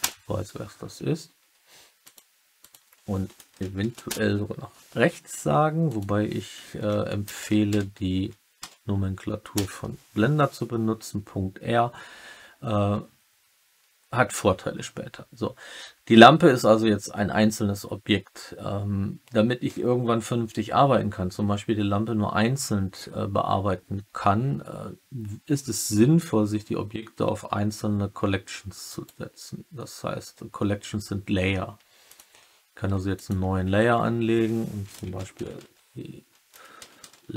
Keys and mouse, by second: 2.1-5.5 drag, 5.8-11.0 drag, 7.3 BackSpace, 28.8-32.1 right drag, 33.1 click, 33.8 F2.